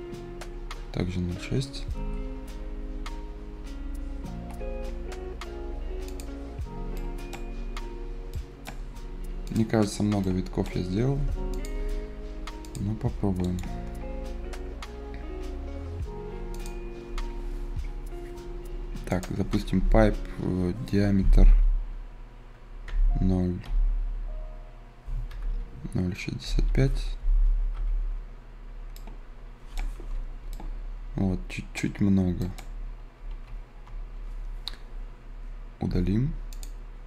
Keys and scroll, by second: 4.3 Return, 22.8 `, 23.6 ï, 25.2-27.0 typing, 27.7 Return, 33.3 ctrl+z, 35.8 Delete.